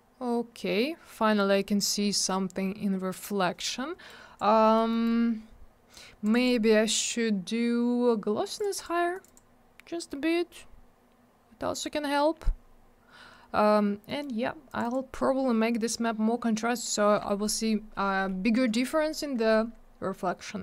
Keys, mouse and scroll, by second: 0.5-0.8 scroll up 1, 2.1-2.5 scroll down 1, 4.1 click, 4.6 middle click, 4.8 middle click, 4.9 middle click, 5.1 double middle click, 6.2 click, 6.3 click, 6.4 double click, 8.6 click, 8.6 click, 8.8 click, 8.8 double click, 9.1 click, 9.2 click, 9.3 click, 9.3 double click, 10.7-11.2 scroll up 1, 11.5-12.2 scroll down 1, 13.2-13.9 scroll up 1, 14.1 middle click, 14.2 middle click, 14.3-14.7 scroll up 1, 14.7 click, 14.8 click, 14.8 click, 14.9 click.